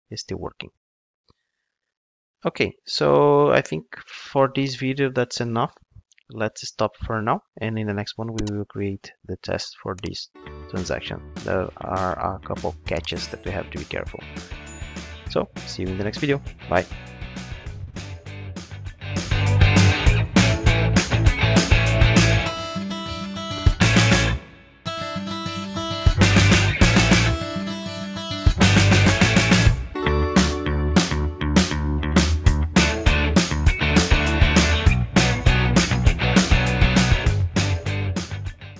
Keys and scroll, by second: 10.0 super+1.